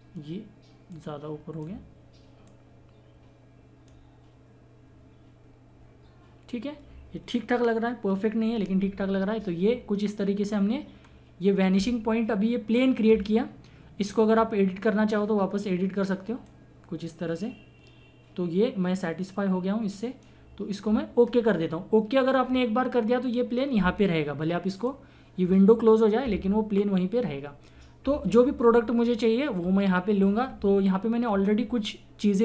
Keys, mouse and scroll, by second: 11.0-12.4 scroll up 1, 16.4-22.5 drag, 24.8 click.